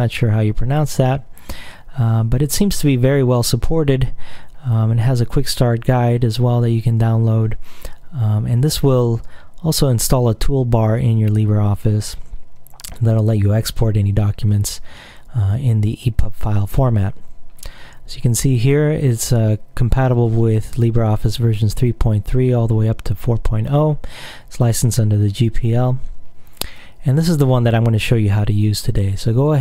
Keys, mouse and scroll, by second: 2.2-2.7 scroll down 2, 4.6-5.1 scroll down 2, 17.7-18.8 scroll down 2.